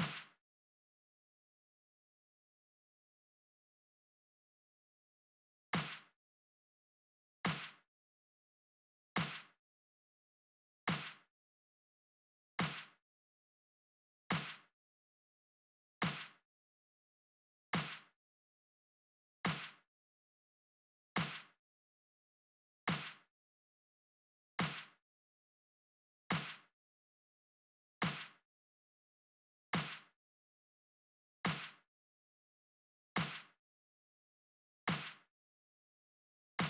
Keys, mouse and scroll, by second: 2.5-4.0 drag, 4.9 click, 5.5 space, 12.4 click, 14.2-15.8 drag, 19.7 click, 20.0 click, 21.1-22.8 drag, 25.9 click, 28.8-30.0 drag, 30.9 click, 32.2 click, 35.3-36.6 drag.